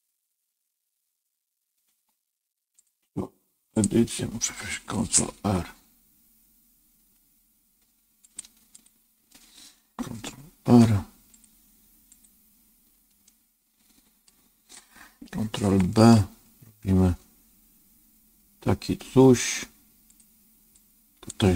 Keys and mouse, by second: 2.7-3.7 drag, 5.3 ctrl+r, 10.6 ctrl+r, 13.2-14.2 middle drag, 15.9 ctrl+b, 20.8 click.